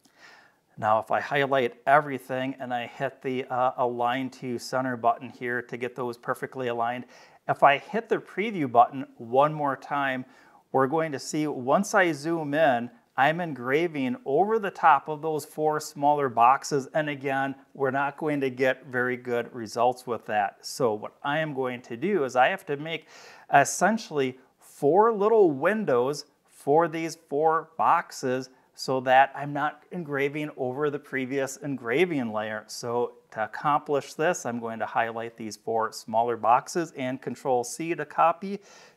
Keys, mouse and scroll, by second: 0.7-1.8 drag, 4.5 click, 8.4 click, 10.5-12.7 scroll up 12, 17.0 click, 19.2 click, 20.4 click, 21.7-23.1 drag, 33.2 click, 33.7-34.9 drag, 37.6 ctrl+c.